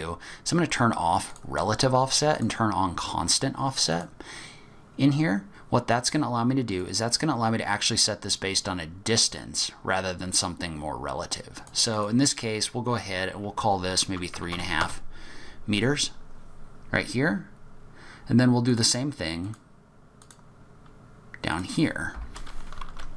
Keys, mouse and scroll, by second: 1.3 click, 2.3 click, 3.9 click, 6.8 click, 11.9 click, 16.6-17.7 scroll down 4, 17.2-17.7 scroll up 1, 17.7-18.7 scroll down 2, 18.7 click, 19.4 click, 20.2 click, 20.6-21.5 scroll down 3, 21.5 click.